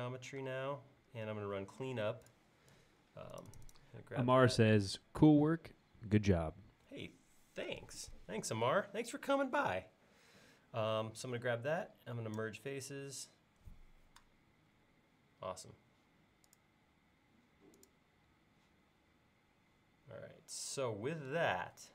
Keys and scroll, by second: 0.5 space.